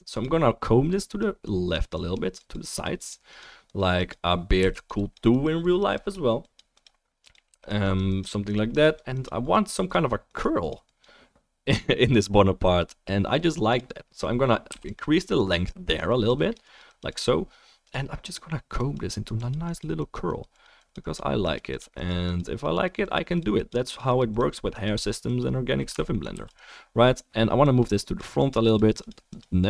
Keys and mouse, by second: 4.6 f, 4.8 click, 7.5 f, 7.6 click, 12.5-14.3 middle drag, 14.7 f, 14.9-15.4 drag, 26.1-26.5 alt+middle drag, 26.4 f, 26.5-27.6 drag.